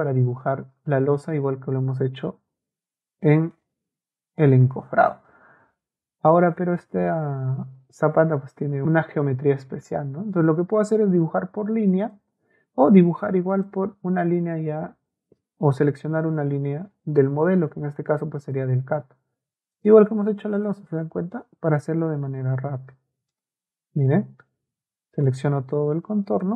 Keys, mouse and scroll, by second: 18.4 click, 19.8 click, 20.6 click, 20.9 middle click, 22.4 click, 23.3 click, 25.3 click, 26.4 click.